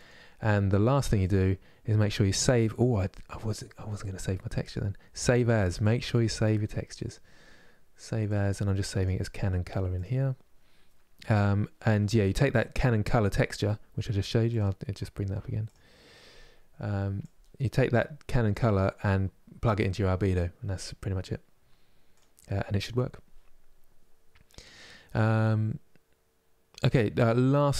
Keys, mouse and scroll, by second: 0.9 click, 5.8-8.3 drag, 15.5-17.2 drag.